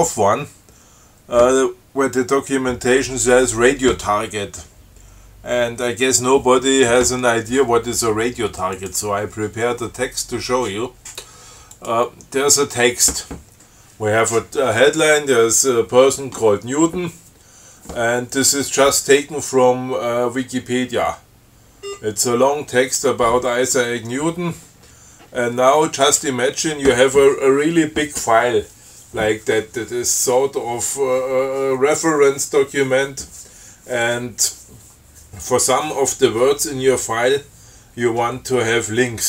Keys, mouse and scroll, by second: 9.0 click, 12.0 click, 20.7 scroll down 2, 21.6 scroll down 2, 22.0 scroll up 2.